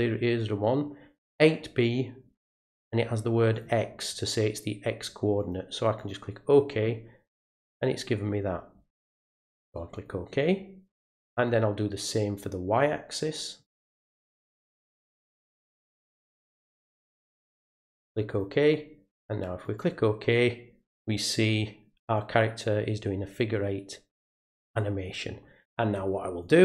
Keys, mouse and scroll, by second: 3.5 click, 5.4 click, 6.0 click, 9.9 click, 11.4 click, 13.6 click, 15.7 click, 17.0 click, 18.3 click, 19.6 click, 26.4 right click.